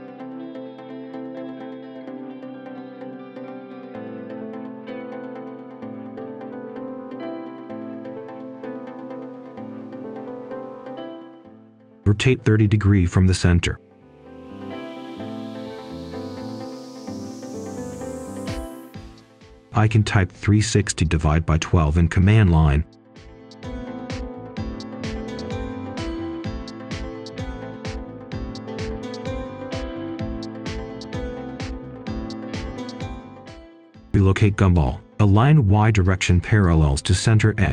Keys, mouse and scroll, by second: 0.1 ctrl+shift+click, 1.0 Return, 1.2 click, 1.5 ctrl+shift+click, 2.1 Return, 2.5 click, 2.6 Return, 2.8 click, 3.0 click, 3.1 ctrl+shift+click, 3.6 Return, 4.4 click, 4.8-5.8 scroll down 1, 5.8 right click, 7.1 click, 8.5-9.4 scroll up 1, 9.4-9.8 scroll down 1, 9.8 scroll up 1, 10.1-10.4 scroll down 1, 10.4 right click, 11.0 click, 11.9-12.8 typing, 13.5-14.9 scroll up 1, 14.9 click, 15.1-15.7 scroll down 1, 16.4 shift+click, 18.3-19.8 typing, 20.8-21.3 typing, 22.7 Return, 23.7 click, 24.6-26.8 scroll up 1, 26.8 click, 29.1-29.4 scroll up 1, 29.6 ctrl+shift+click, 29.8-30.2 scroll up 1, 30.3 click, 30.6-31.0 scroll down 1, 31.5 ctrl+shift+click, 33.5 right click, 34.7 click, 35.2 right click, 35.9-37.7 drag.